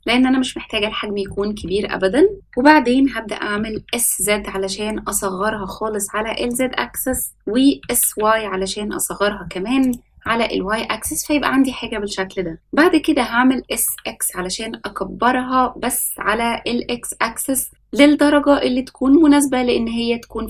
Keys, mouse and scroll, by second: 0.3-1.0 scroll up 3, 1.2-1.6 shift+middle drag, 1.7 scroll up 2, 2.3 shift+middle click, 3.5 s, 7.7 s, 10.2-11.0 middle drag, 11.7-12.5 scroll down 1, 13.3 s.